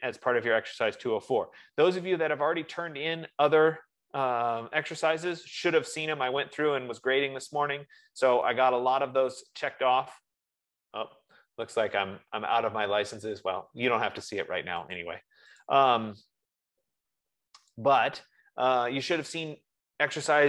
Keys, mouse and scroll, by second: 17.1 click, 18.4 click.